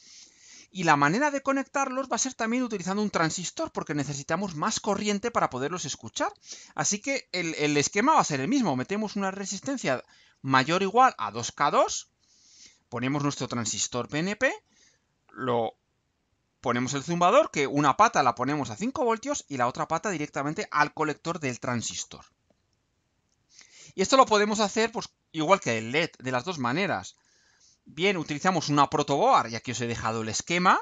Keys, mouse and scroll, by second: 23.0-23.8 scroll down 4, 24.5-24.8 scroll down 2.